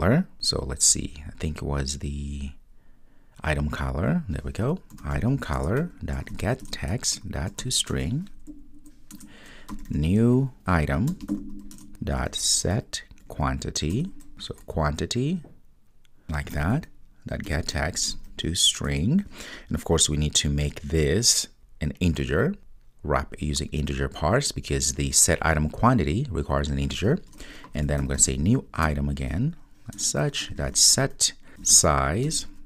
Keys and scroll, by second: 5.6 Return, 11.8 Return, 15.7 Return, 30.0 Return.